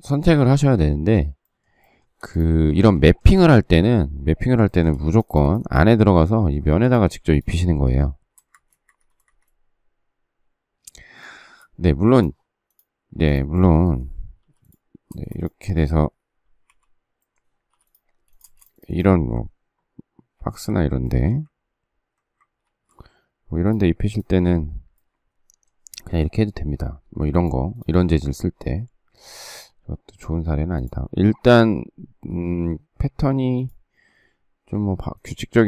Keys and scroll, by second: 8.3 space, 8.5 Escape, 8.9 Escape, 9.1 space, 14.3 p, 15.1 space, 16.7 y, 17.7 p, 18.4 space, 20.3 ctrl+b, 22.6 ctrl+g, 27.0 ctrl+z, 29.2 ctrl+z.